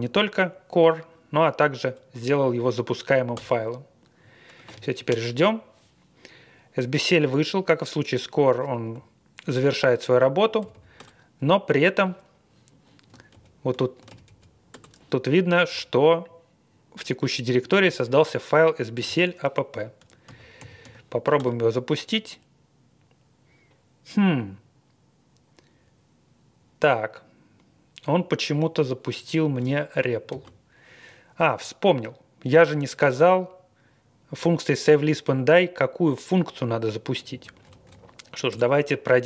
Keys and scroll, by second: 3.4 Return, 10.6 typing, 10.9 Return, 13.3 ctrl+l, 14.1 typing, 14.7 Return, 15.6 typing, 18.9-20.8 typing, 21.4 Return, 30.3 ctrl+d, 37.3 Up, 37.6 Up, 37.8 Up, 38.5 Return.